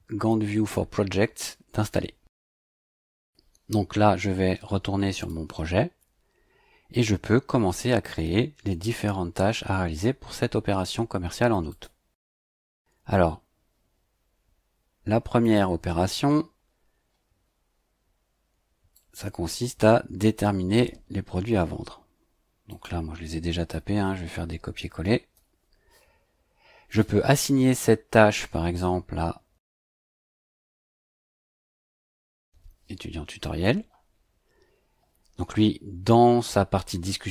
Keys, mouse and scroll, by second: 3.1 click, 5.1 click, 11.7 click, 15.4 click, 16.3-16.6 scroll up 2, 17.0-17.6 scroll up 4, 18.9-20.4 drag, 21.6 ctrl+c, 22.7 click, 23.7 KP_1, 24.0 KP_Subtract, 24.8 space, 25.3 ctrl+v, 26.9 click, 30.6-32.1 typing, 33.4 click.